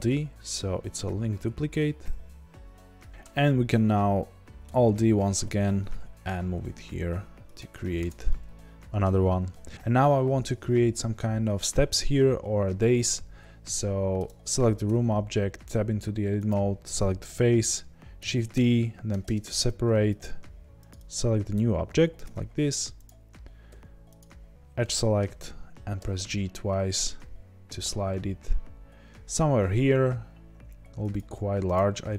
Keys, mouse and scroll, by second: 3.1 click, 4.6 alt+d, 8.0 click, 8.2-9.7 middle drag, 9.0-9.4 scroll down 2, 9.7 click, 14.8 Tab, 16.4 click, 18.1 shift+d, 19.2 p, 19.3 Return, 19.5 Tab, 20.2 click, 20.9 click, 22.2 Tab, 23.6 2, 24.1 click, 24.8-31.7 middle drag, 26.0 g, 31.7 click.